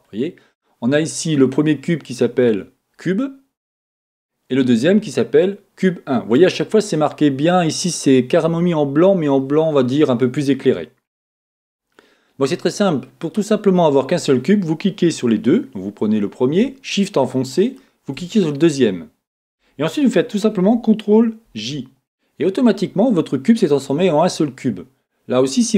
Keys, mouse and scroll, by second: 4.7 click, 17.7 shift+click, 21.4 ctrl+j, 25.7 click.